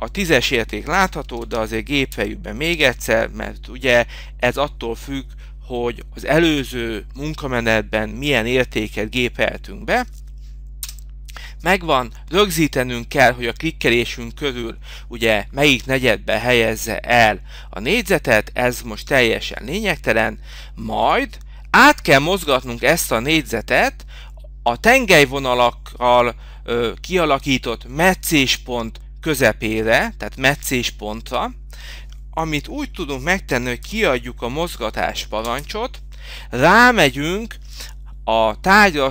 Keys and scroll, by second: 1.2 Return, 28.1 F8.